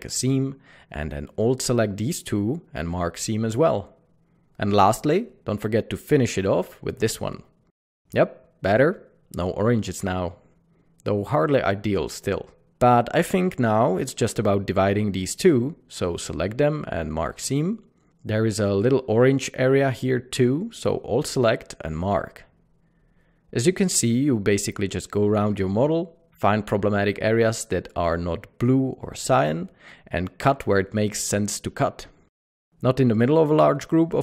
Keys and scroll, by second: 6.9 typing, 16.4 typing, 23.0 typing, 29.1 Tab, 32.7 typing.